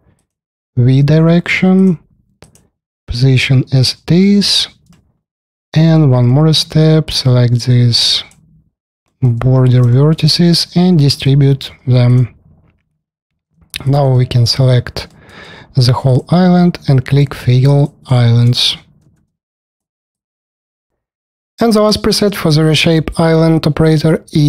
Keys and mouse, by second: 1.5-2.0 drag, 4.5 middle drag, 4.7 alt+click, 5.6 alt+middle click, 6.4 1, 8.9 alt+middle click, 9.7 alt+middle click, 11.9 click, 13.4 middle click, 13.4 3, 13.7 middle click, 13.9 alt+middle click, 14.9 alt+middle click, 17.1 click, 17.4 click, 19.0 alt+t.